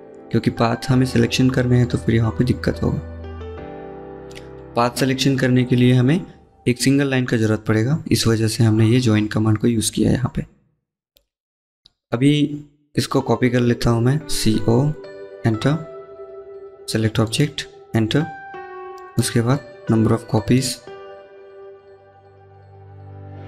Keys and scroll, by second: 13.2 c, 15.3 typing.